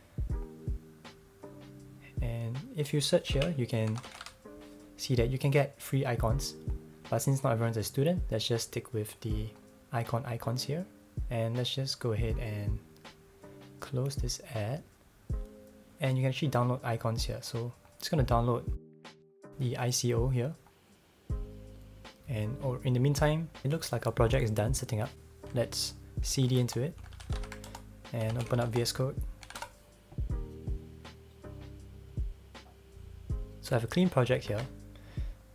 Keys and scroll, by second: 3.3 super+f, 3.6-4.7 typing, 26.0-29.9 typing, 34.5 ctrl+Tab.